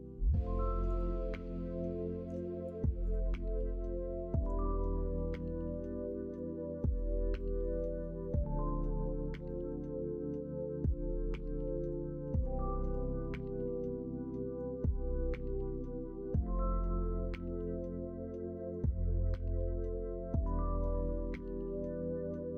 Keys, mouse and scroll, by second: 11.1 middle click, 12.6 shift+middle click, 13.2-14.6 middle drag.